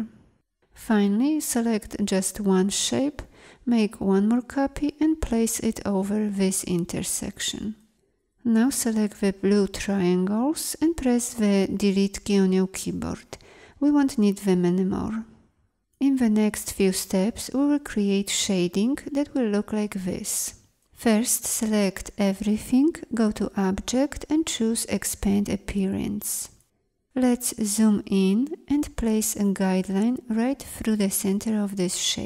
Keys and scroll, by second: 11.5 Delete.